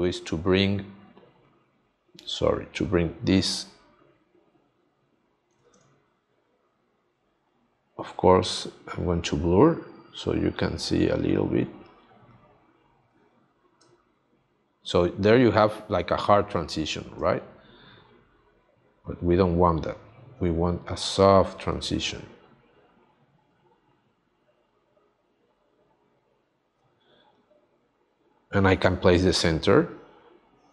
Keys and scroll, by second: 5.8 space, 13.8 space.